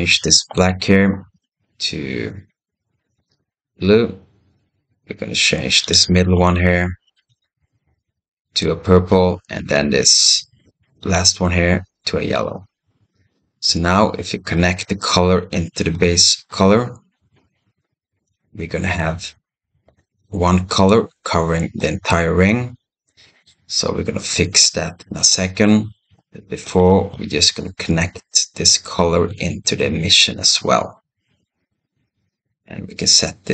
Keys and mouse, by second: 5.7 click, 6.3 click, 9.5 click, 10.8 click, 14.6-15.8 drag, 18.1 click, 20.7 click, 22.1-23.3 middle drag, 24.7 click, 25.7 middle click, 25.9 click, 26.3 middle click, 28.5 click, 28.8-31.3 drag, 33.4-33.5 drag.